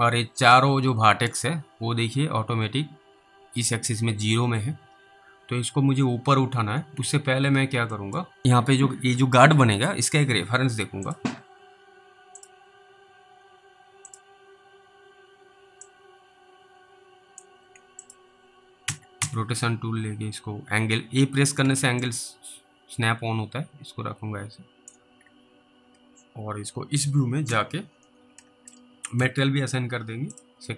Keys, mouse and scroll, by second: 0.3 click, 2.1-3.7 scroll up 3, 5.6 alt+w, 7.0 alt+w, 7.4 alt+w, 8.2 scroll down 2, 8.2 middle click, 11.1 click, 16.2 click, 18.1 click, 18.9-19.2 typing, 21.6 a, 22.3 click, 25.2 alt+w, 26.9 alt+w, 27.5 z, 27.9 scroll down 3, 29.2 alt+m, 30.4 click.